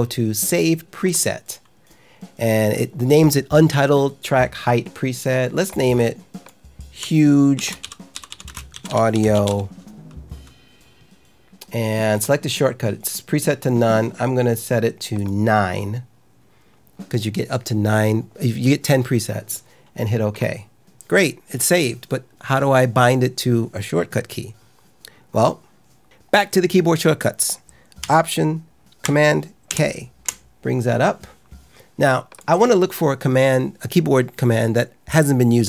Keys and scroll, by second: 7.2-9.9 typing, 29.6 alt+super+k.